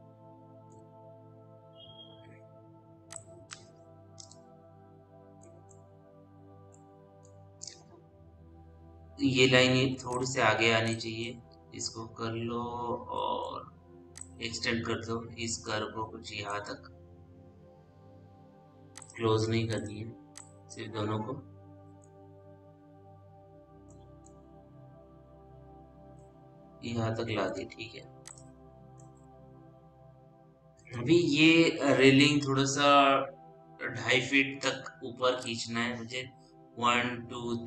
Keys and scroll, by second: 1.6 F3, 4.3 l, 23.0 p, 29.1 l.